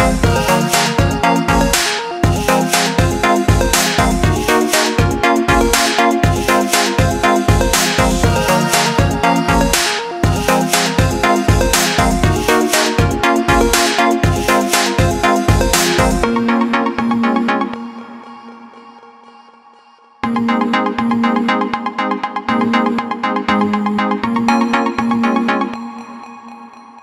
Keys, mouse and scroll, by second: 3.8 alt+click, 6.6 Caps_Lock, 8.5 click, 9.9 click, 15.6 click, 18.6 click, 24.5 click, 25.7 alt+click.